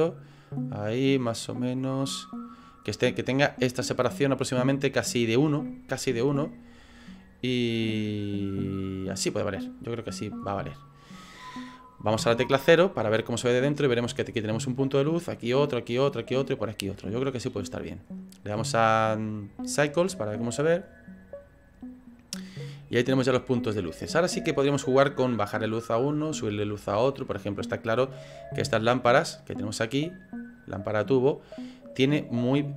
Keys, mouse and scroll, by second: 0.0 click, 1.1 click, 1.3 click, 1.8 click, 2.8-5.3 scroll down 2, 5.3-5.9 scroll down 1, 7.6 click, 8.6 click, 12.2 KP_0, 19.7 click, 22.1 right click, 30.5 click.